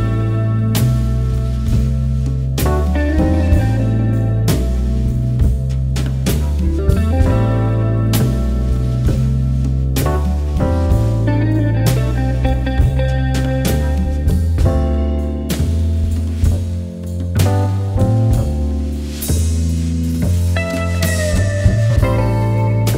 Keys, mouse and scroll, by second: 4.0-4.8 alt+scroll down 1, 4.8 click, 8.8 alt+scroll down 1, 11.0 shift+click, 20.9 alt+scroll up 1, 21.7 alt+scroll up 1, 22.4 alt+scroll down 1, 22.6 alt+scroll up 1.